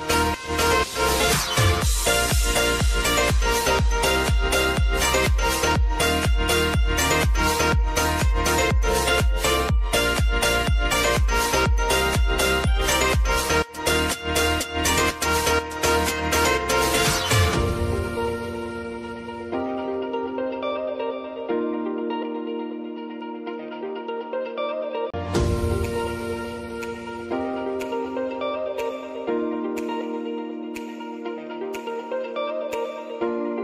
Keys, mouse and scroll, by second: 1.6 space, 2.8 -, 7.2 space, 10.1-13.9 drag, 19.2 click, 21.6 ctrl+0, 23.2-28.2 drag, 29.0 space, 31.1 s, 31.8-33.6 drag.